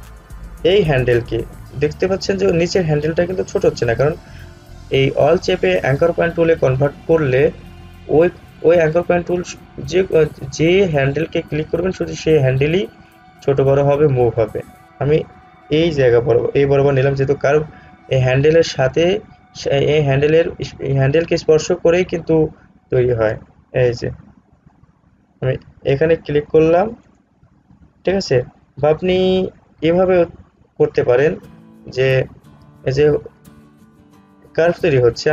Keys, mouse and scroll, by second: 27.2 click, 29.9 ctrl+z.